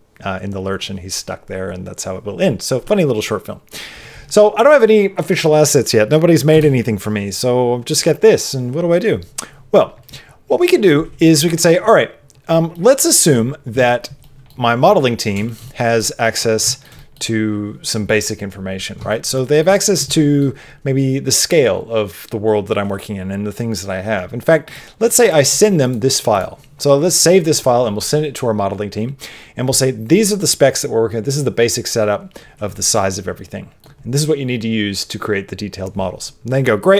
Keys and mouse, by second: 6.5 KP_0, 12.7 middle click, 14.2 middle click, 14.9 middle click, 15.4 shift+middle click, 15.6 middle click, 16.2 middle click, 16.6 shift+middle click, 16.9 middle click, 19.0 shift+middle click, 19.3 middle click, 20.0 middle click, 25.5 click, 32.9 middle click.